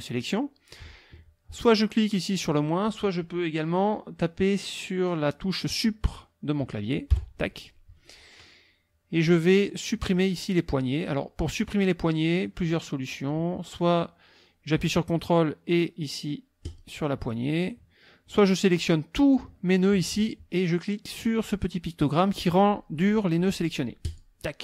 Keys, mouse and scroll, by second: 7.1 Delete, 9.9-11.4 drag, 12.6 click, 16.6 ctrl+click, 18.3-19.5 drag, 24.1 click.